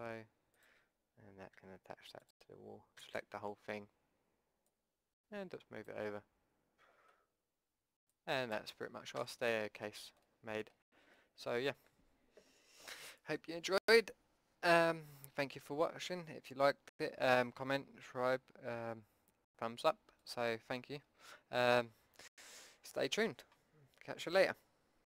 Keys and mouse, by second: 1.5 e, 2.9 a, 3.1 a, 4.7 click, 5.3 click, 5.8 click, 6.0 middle click, 6.7 middle click, 8.0-9.2 drag, 9.2 a, 9.4 middle click, 10.8 middle click.